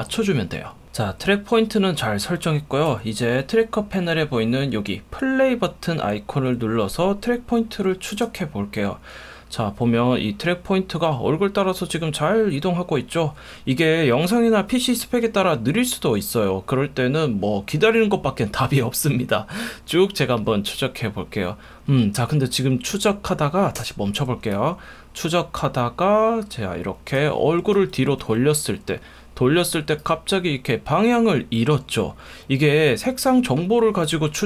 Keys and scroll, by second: 1.0 F1, 2.9 F1, 23.8 space, 27.7 F1.